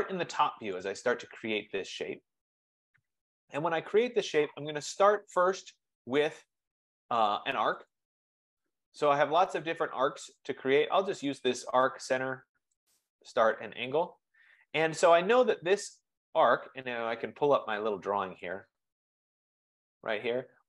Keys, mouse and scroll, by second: 0.8 click, 1.4 click, 8.0 click, 13.0 click, 17.6 click, 18.8-20.6 drag.